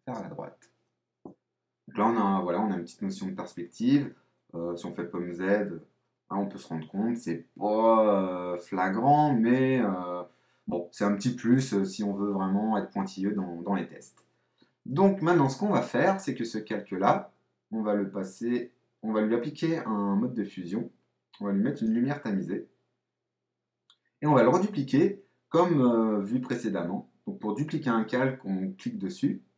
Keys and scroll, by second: 4.9 super+z.